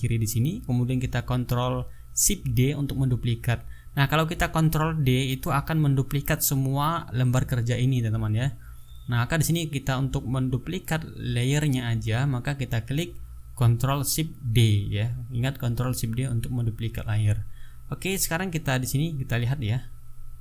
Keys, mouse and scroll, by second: 0.5-3.3 drag, 12.3 ctrl+shift+d, 16.5 ctrl+z.